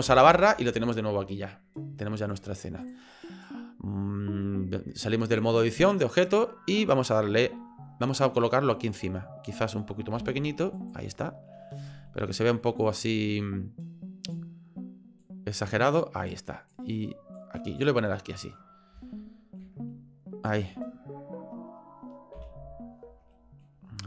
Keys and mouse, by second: 0.1 KP_Divide, 2.8 click, 8.7 click, 10.2 s, 12.2 ctrl+click, 13.5 click, 15.2-16.7 drag, 17.4 click, 18.1 middle click, 19.1 shift+middle click, 20.0 ctrl+middle click, 22.3 KP_3, 23.4 shift+click.